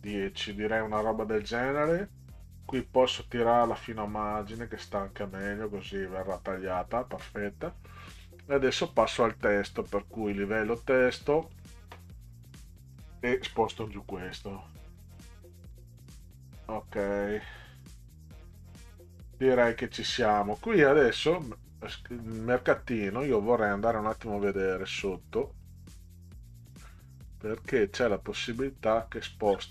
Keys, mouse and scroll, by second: 2.8-5.0 drag, 8.1 click, 11.4 click, 12.6 click, 14.3 Down, 14.6 Down, 15.0 Down, 15.3 Down, 15.8 Down, 16.0 Down, 21.0 click, 21.3 click, 24.4 click, 27.3 click, 28.5-29.7 scroll down 28.